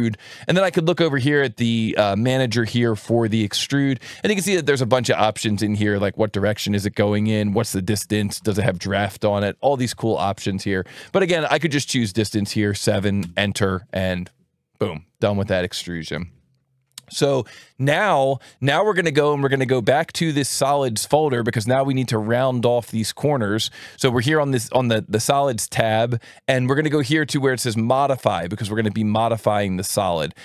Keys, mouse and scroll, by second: 1.7 click, 3.9 alt+1, 4.7 click, 6.0 ctrl+shift+click, 7.3 ctrl+shift+click, 8.7 ctrl+shift+click, 10.2 alt+1, 11.0-12.4 drag, 12.7 KP_7, 13.1 KP_Enter, 19.9 alt+1, 22.0 click, 22.8-24.1 drag, 24.6 ctrl+shift+click, 27.1-28.8 drag.